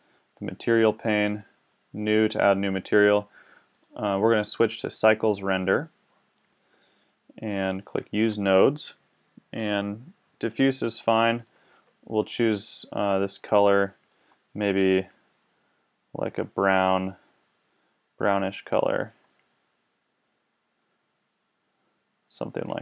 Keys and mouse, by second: 1.3-3.4 drag, 3.7-6.2 drag, 7.7-13.2 drag.